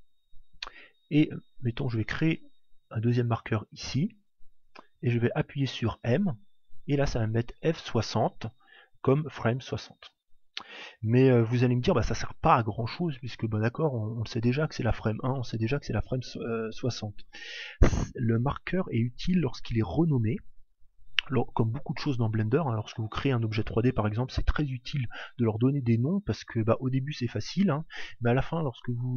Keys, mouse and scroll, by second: 1.3 click, 6.1 m.